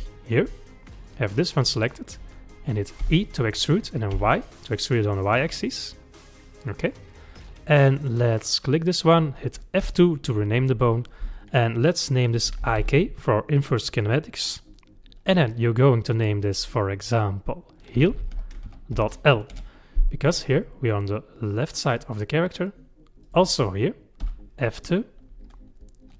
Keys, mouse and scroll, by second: 0.1 shift+middle click, 1.0 click, 3.0 e, 8.5 click, 9.8 F2, 18.2 e, 20.9-23.3 middle drag, 23.3 click, 24.2 F2.